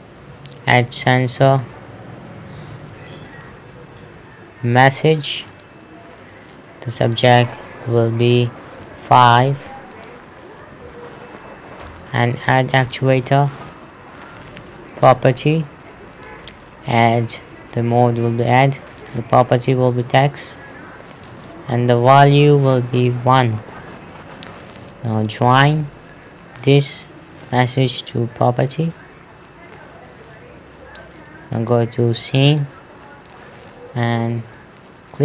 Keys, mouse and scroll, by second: 1.5 click, 6.0 click, 9.3 KP_5, 9.8 Return, 10.4 click, 10.8 KP_5, 11.1 Return, 12.8 click, 15.4 click, 23.8 KP_1, 24.1 Return, 25.8 click, 32.0 click.